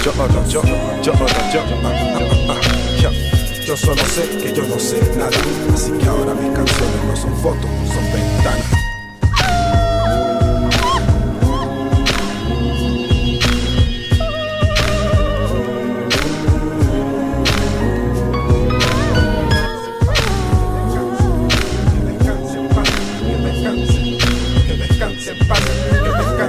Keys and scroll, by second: 19.9 z, 24.5 0.